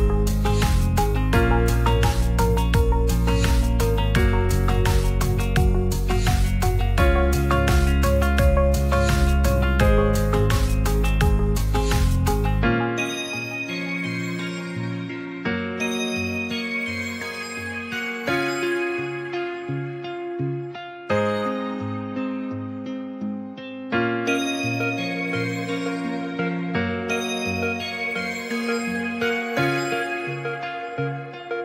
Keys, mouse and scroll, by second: 1.2 middle drag, 2.2 ctrl+s, 2.5 shift+middle drag, 2.8 middle drag, 3.8 middle click, 4.1 middle drag, 4.7 shift+d, 6.6 s, 7.1 middle click, 7.8 click, 10.2 ctrl+a, 11.3 Tab, 11.7 alt+z, 12.1 click, 12.4 g, 14.1 click, 14.6 Tab, 14.9-15.2 middle drag, 16.7 alt+z, 18.3 s, 18.5 z, 19.6 click, 19.8 g, 19.8 z, 20.3 click, 20.7 ctrl+a, 21.3 shift+middle drag, 22.9 shift+d, 23.0 right click, 23.2 g, 23.3 z, 25.8-26.2 drag, 26.2 scroll up 1, 26.3-26.9 middle drag, 26.9 scroll down 1, 27.5 ctrl+a, 28.0 middle click, 29.2 shift+a, 30.2 s.